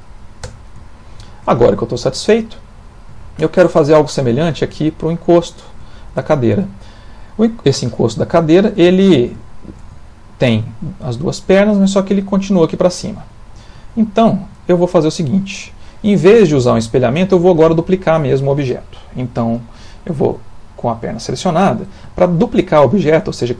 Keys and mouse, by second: 0.4 Tab, 0.9 ctrl+middle click, 1.3 shift+middle click, 2.0 middle click, 3.2 shift+middle click, 6.3 middle click, 8.5 shift+middle click, 8.9 shift+middle click, 9.4 shift+middle click, 10.0 ctrl+middle click, 13.2 shift+middle click, 14.6 middle click, 15.9 middle click, 17.8 shift+middle click, 17.9 shift+middle click, 22.1 shift+middle click.